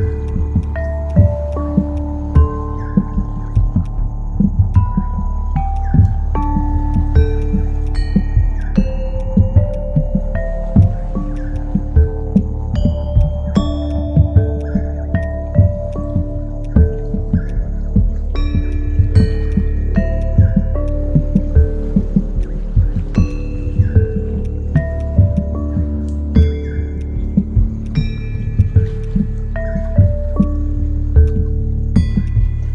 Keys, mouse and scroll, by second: 5.4 ctrl+z, 5.5 w, 21.5 typing.